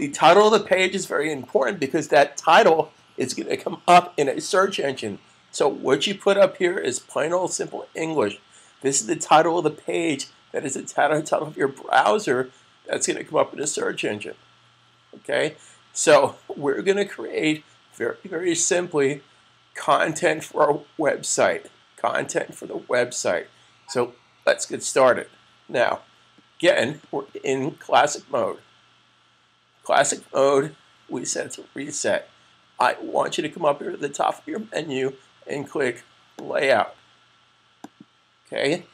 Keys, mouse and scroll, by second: 0.0-1.3 typing, 13.5 click, 36.1 click.